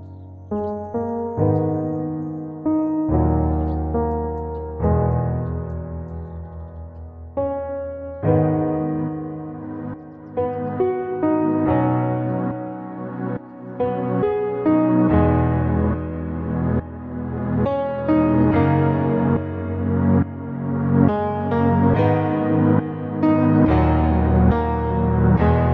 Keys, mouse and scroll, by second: 1.0-5.4 drag, 6.0-9.0 drag, 9.7-11.9 drag, 12.5-13.1 scroll down 2, 14.9-22.7 drag, 19.2 KP_0, 24.9-25.7 middle drag.